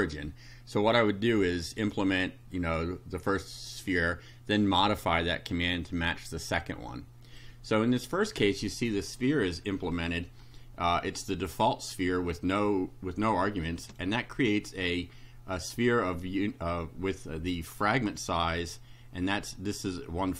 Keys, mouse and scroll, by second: 7.3 click, 11.7 click, 13.4 shift+right click.